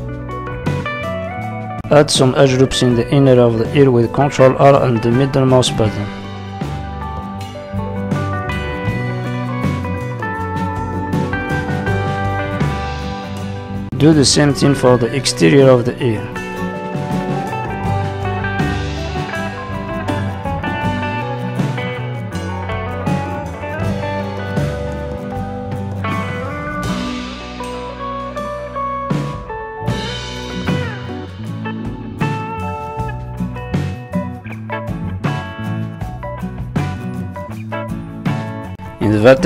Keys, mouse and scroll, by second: 0.0 click, 1.0 click, 1.9 middle click, 2.7-3.0 scroll up 2, 3.0 middle click, 4.1 ctrl+r, 6.6 middle click, 7.2 scroll down 3, 7.5 middle click, 8.1 Tab, 8.4 middle click, 9.8 Tab, 9.9 middle click, 10.7 middle click, 11.9 scroll up 1, 12.8 ctrl+r, 16.3 middle click, 19.0 ctrl+r, 20.4 click, 20.7 middle click, 22.9 middle click, 24.7-25.2 scroll up 2, 25.0 middle click, 27.3 middle click, 27.3 click, 28.1 click, 28.3 middle click, 29.9 o, 29.9 click, 30.7 s, 32.5 click, 33.4 middle click, 33.9 click, 34.2 middle click, 35.4 scroll up 2, 36.0 click, 36.3 middle click, 36.8 click, 37.9 middle click, 38.9 shift+middle click.